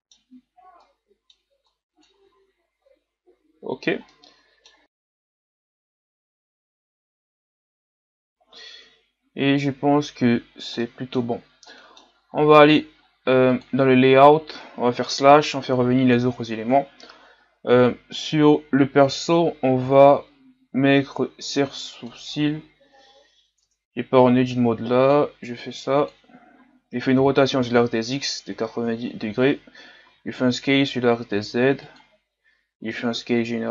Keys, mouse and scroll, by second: 0.8-2.6 middle drag, 2.6-3.4 shift+scroll down 2, 3.8 shift+scroll down 1, 4.8 right click, 5.0 click, 5.6 a, 5.7 scroll down 3, 5.8 middle click, 6.1 shift+scroll up 2, 6.2 middle click, 6.4 right click, 6.6 click, 7.4 scroll down 1, 7.5 middle click, 9.0-10.5 scroll down 6, 10.5 scroll down 1, 10.8 middle click, 11.5 scroll up 1, 11.7 middle click, 12.3-13.7 scroll up 2, 13.7 click, 15.1 KP_Divide, 16.7 KP_1, 22.2 shift+a, 23.6 Tab, 24.5-26.5 drag, 26.5-27.1 scroll up 4, 27.2 r, 30.1 s, 32.9 s.